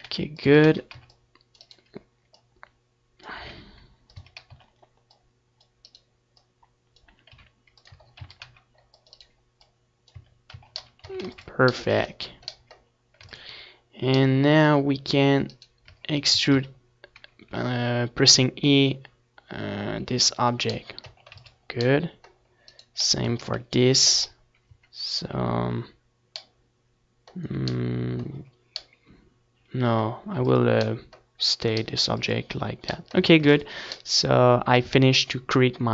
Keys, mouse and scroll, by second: 0.9-2.8 right drag, 1.4-6.5 drag, 2.2 r, 3.3 a, 3.5 c, 4.3-6.5 right drag, 5.2 a, 5.7 Tab, 6.0 middle click, 6.2 z, 6.4 ctrl+s, 8.4 ctrl+s, 10.8-12.5 right drag, 11.2 Tab, 11.5 a, 11.8 a, 13.6 e, 15.9 click, 16.5 Tab, 16.8 ctrl+s, 18.7 Tab, 19.1 z, 20.1 a, 22.9 z, 23.9 Tab, 25.9 ctrl+s, 27.8 ctrl+s, 29.0 a, 29.2 ctrl+s, 33.4-35.4 middle drag.